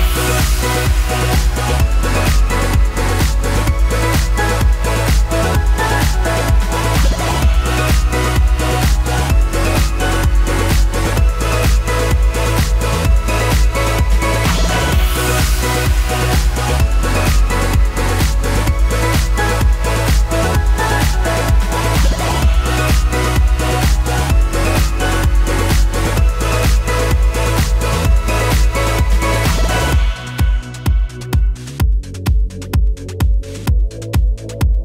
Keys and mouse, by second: 0.0 click, 0.1 ctrl+middle click, 0.1 g, 0.5 click, 0.7-3.5 ctrl+shift+middle drag, 0.7 g, 1.3 g, 1.7 click, 1.7 g, 2.6 ctrl+g, 3.3 g, 3.5 click, 3.6-14.6 ctrl+middle drag, 3.6 g, 3.8 g, 5.0 ctrl+g, 6.5 g, 7.2 g, 8.0 ctrl+g, 9.1 g, 10.0 Tab, 10.8 ctrl+j, 11.2 Tab, 11.3 Tab, 13.0 m, 14.2-17.1 d, 14.6-24.1 drag, 17.5 m, 23.0 d, 23.1-24.6 right drag, 23.5 d, 24.1 alt+middle click, 24.5-30.3 middle drag, 24.5 g, 24.6 click, 24.7 g, 26.0 g, 27.0 g, 28.6 alt+z, 28.6 alt+Tab, 30.1 d, 30.3-34.8 drag, 30.8 d, 32.5 d, 32.6-34.8 right drag, 32.7 d, 33.0 d, 33.0 KP_3.